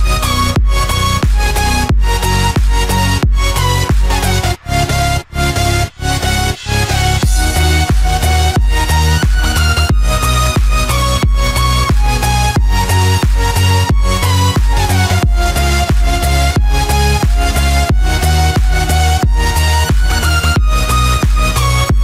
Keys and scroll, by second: 0.3 ctrl+d, 5.6 ctrl+f, 5.8 ctrl+d, 13.5 ctrl+f, 13.7 ctrl+d, 14.9 ctrl+-, 16.0 ctrl+=, 20.2 ctrl+f.